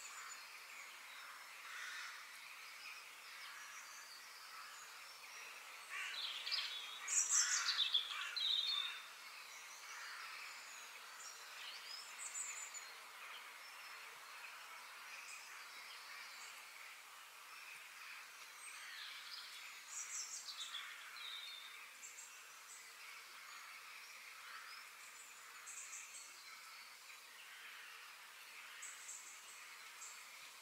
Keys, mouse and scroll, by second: 1.1-3.0 middle drag, 4.9 g, 7.1 KP_3, 7.7-8.2 scroll up 2, 11.9 g, 14.4-16.3 middle drag, 19.4 f, 24.6-26.5 middle drag.